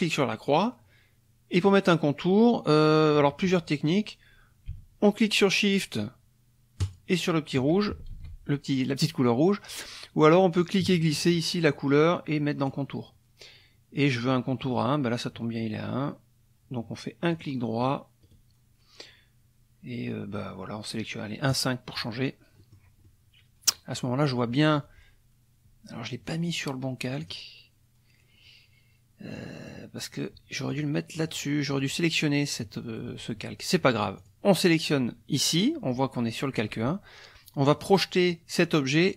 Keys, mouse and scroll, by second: 6.8 shift+click, 8.1 ctrl+shift+z, 10.6-12.9 drag, 14.7 click, 17.3 click, 17.8 click, 18.2 click, 21.5 click, 22.6 middle click, 23.0-27.2 middle drag, 27.2 click, 29.3 click, 30.7 click, 31.1 click, 31.7 click, 34.2 click.